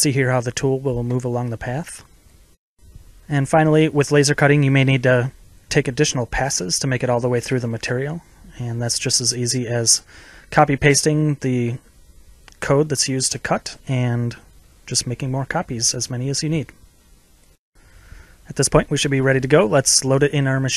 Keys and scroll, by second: 13.6 ctrl+c, 17.9 ctrl+v.